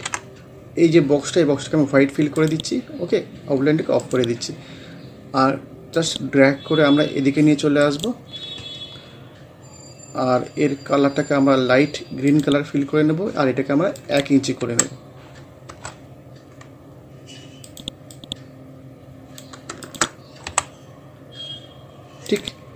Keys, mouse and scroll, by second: 2.4 click, 4.0 right click, 6.0-7.9 drag, 7.9 right click, 12.3 click, 14.6 1, 15.7 Return, 16.5 scroll up 1, 17.7-19.9 drag, 20.5 t, 20.8 scroll down 1, 22.3 click.